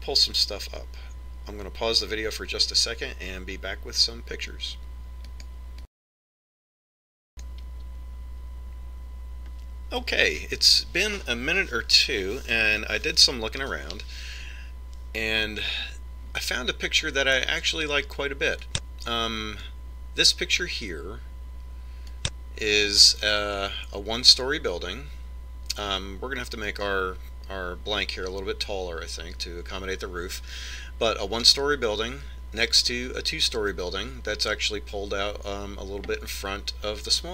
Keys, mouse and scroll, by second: 18.7 click, 22.2 click, 23.6 middle click.